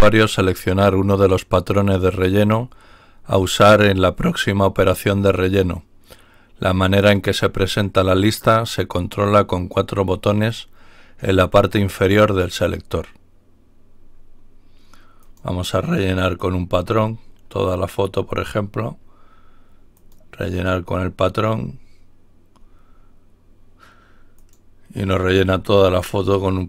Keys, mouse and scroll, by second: 15.1 click, 19.9 click, 24.3 click.